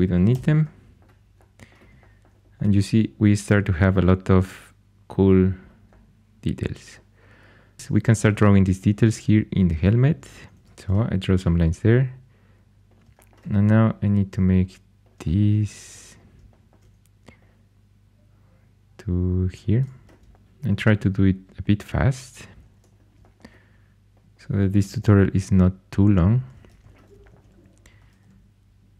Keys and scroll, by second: 0.2 x, 8.3 shift+a, 10.2 shift+a, 10.6 ctrl+super+c, 20.4-21.1 typing, 24.7 typing, 26.6 2, 28.0 ctrl+super+c.